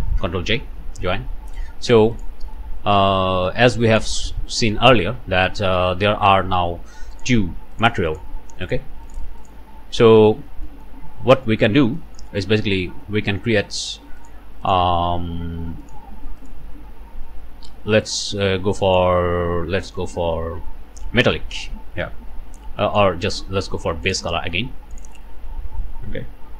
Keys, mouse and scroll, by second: 0.2 ctrl+j, 2.1 click, 3.9 click, 6.3-6.6 scroll up 1, 7.2 click, 7.8 click, 8.1 click, 8.6 click, 9.1 click, 9.4 click, 10.3-10.7 scroll up 2, 10.7 click, 11.0 scroll down 3, 11.8 alt+a, 12.0 alt+middle click, 12.3 alt+scroll up 1, 13.8 click, 14.2 click, 14.6 click, 15.8 click, 16.4 click, 18.0 click, 18.5 scroll down 2, 18.8 middle click, 19.1-19.9 scroll up 2, 20.0-21.5 middle drag, 21.6 scroll down 2, 22.8 ctrl+shift+middle click, 24.1 ctrl+shift+click, 24.9 click.